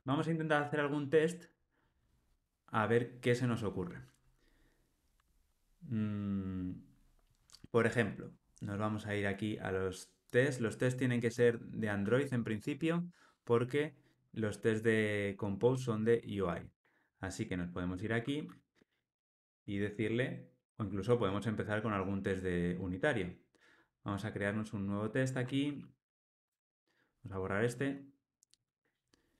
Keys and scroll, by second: 15.7 Delete, 18.4 super+n, 28.2 Delete.